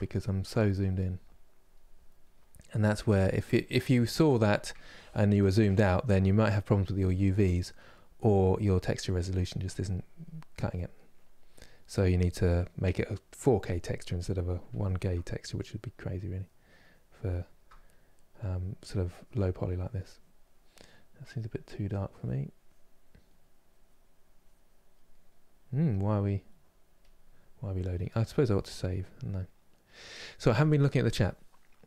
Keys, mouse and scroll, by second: 0.5-3.3 drag, 3.3-4.4 middle drag, 4.4 ctrl+z, 5.1-9.1 middle drag, 9.1-13.8 drag, 13.8-15.9 middle drag, 15.9-17.0 drag, 17.0-18.4 shift+middle drag, 18.4-26.2 drag, 26.2 right click, 26.7 click.